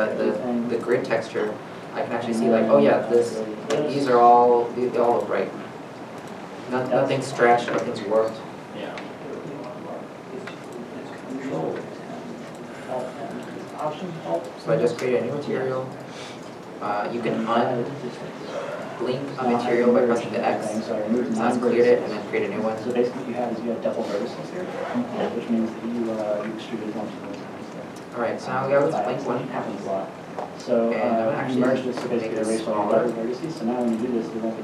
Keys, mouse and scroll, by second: 2.5 middle click, 6.4 Tab, 7.3 middle click, 9.6 Tab, 10.2 scroll, 10.3-11.1 scroll up 1, 11.1 Tab, 11.1-11.4 scroll down 1, 12.1 shift+middle click, 12.5 middle click, 25.6 middle click, 27.0 Tab, 27.7 middle click, 29.4 shift+middle click, 31.0 shift+middle click.